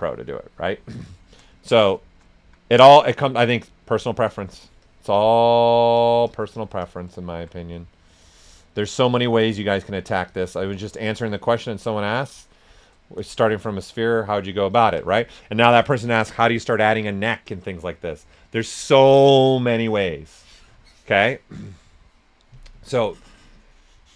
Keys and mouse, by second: 1.6 ctrl+right click, 2.2 alt+shift+right click, 4.8 alt+click, 7.9-13.0 alt+drag, 13.0 right click, 14.2 alt+right click, 14.7 typing.